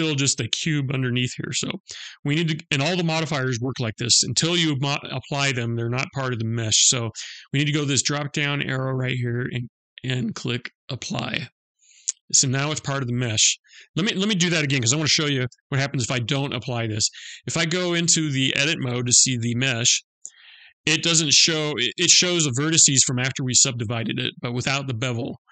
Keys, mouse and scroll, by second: 7.6 click, 9.7 click, 14.9 ctrl+z, 17.3 click, 19.2 Tab, 20.6 middle click.